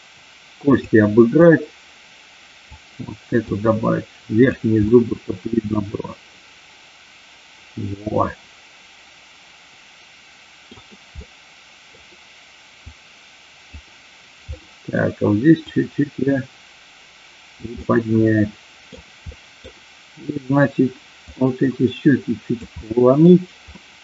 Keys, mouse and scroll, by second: 1.4-2.6 drag, 3.4-4.5 drag, 4.8-10.7 middle drag, 11.3 middle click, 12.8 click, 14.5 middle click, 15.7-17.7 drag, 17.8-18.9 middle drag, 19.3 middle click, 21.3-22.5 drag, 22.7 middle click, 23.7 middle click.